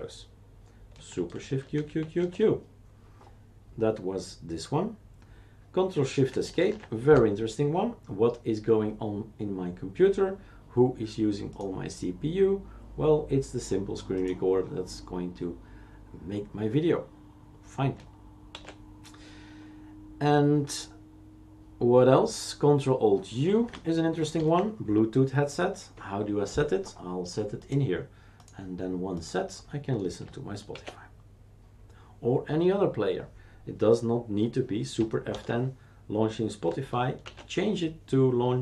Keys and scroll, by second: 1.4 shift+super+q, 1.7 shift+super+q, 6.6 ctrl+shift+Escape, 18.5 shift+super+q, 24.3 ctrl+alt+u, 30.7 shift+super+q, 35.3 super+F10, 37.2 shift+super+q.